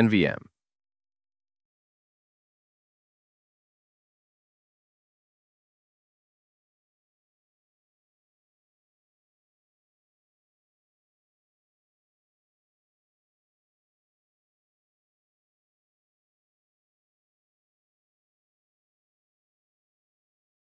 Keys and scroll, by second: 12.9 super+v.